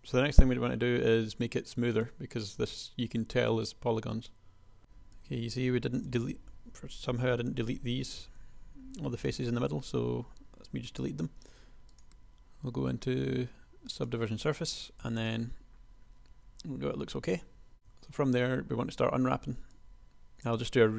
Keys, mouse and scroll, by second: 4.8 KP_1, 4.8 b, 8.3 x, 15.2 Tab, 17.7 KP_1, 18.0 Tab.